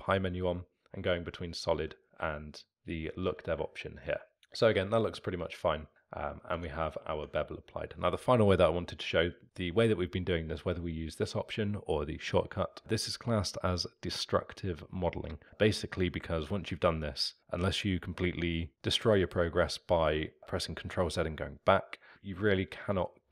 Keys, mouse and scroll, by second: 1.3 z, 2.6 alt+middle drag, 2.7 z, 3.6-6.5 alt+middle drag, 6.5 Tab, 16.7-18.7 alt+middle drag, 22.3-23.3 alt+middle drag.